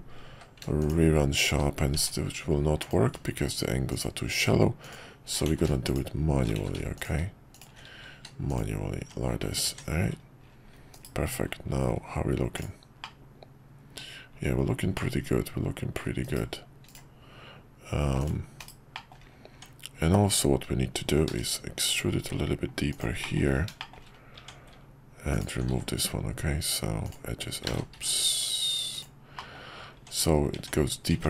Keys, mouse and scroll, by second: 1.9 Tab, 5.5 ctrl+z, 6.6 ctrl+z, 8.1 q, 9.0 Tab, 10.9 /, 13.0-13.9 middle drag, 14.9-16.0 middle drag, 18.6 /, 18.9 middle drag, 19.5 Tab, 21.3 e, 23.2 middle click, 23.9 shift+middle click, 24.3 Tab, 25.7 x, 27.7 ctrl+z, 27.9 x, 29.4 middle click, 29.9 Tab.